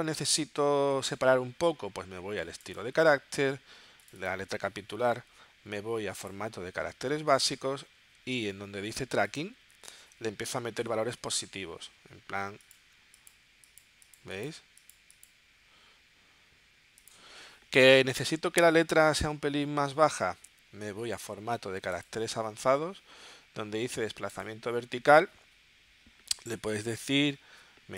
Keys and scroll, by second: 10.4-11.3 typing.